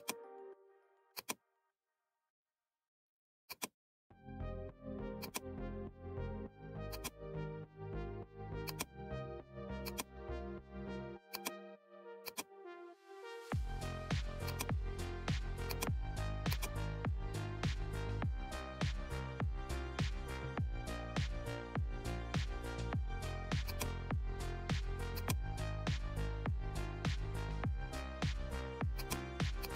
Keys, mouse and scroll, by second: 2.4-2.7 alt+scroll down 1, 3.4-19.0 drag, 19.0 alt+scroll down 1, 21.4-22.0 alt+scroll up 1, 23.6-26.0 drag, 26.0 alt+scroll down 1, 26.7-27.2 alt+scroll down 3, 27.2 alt+scroll up 1, 27.6 scroll down 2, 28.9 click.